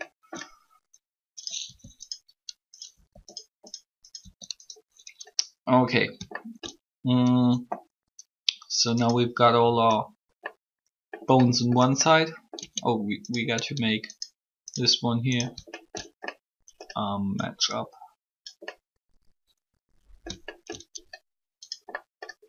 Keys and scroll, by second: 1.6 shift+r, 12.5 Tab.